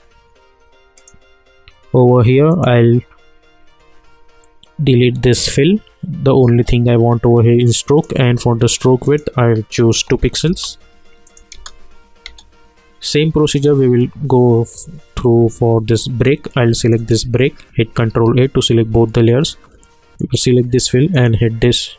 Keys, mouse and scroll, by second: 0.9 click, 5.4 click, 7.9 click, 10.4 Return, 11.2 click, 11.5 space, 13.5 click, 16.8 click, 18.1 ctrl+a, 20.2 click.